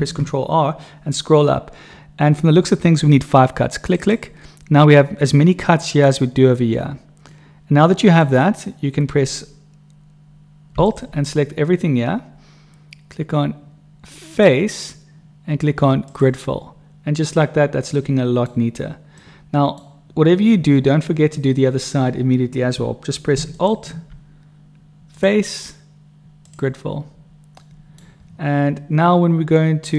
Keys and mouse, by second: 7.4 click, 7.4 right click, 10.8 alt+click, 14.4-16.2 drag, 17.9 click, 19.2 middle click, 23.5 alt+click, 25.0 click, 25.9 right click, 27.6 middle click, 27.8 click, 27.8 right click.